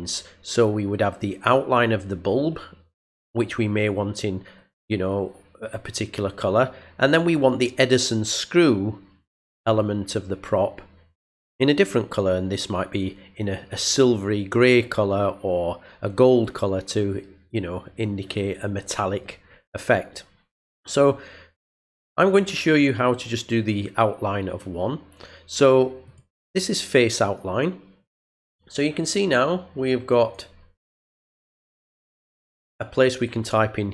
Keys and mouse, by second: 26.1 click, 27.2 click, 30.2 click.